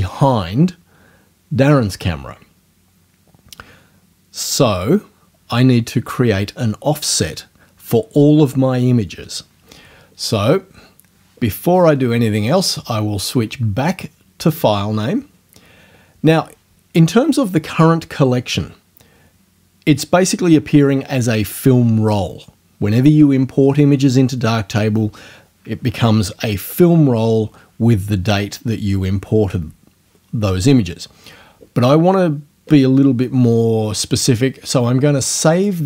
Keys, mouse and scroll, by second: 12.6 click, 14.5 click, 35.5 click.